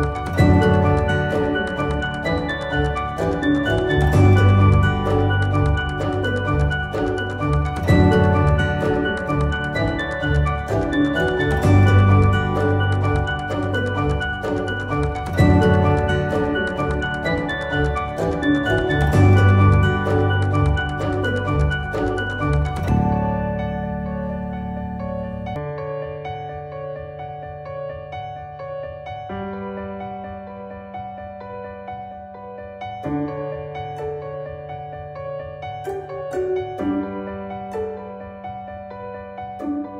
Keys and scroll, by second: 21.5 ctrl+z, 30.7 ctrl+z, 35.1 ctrl+z, 36.7 ctrl+z.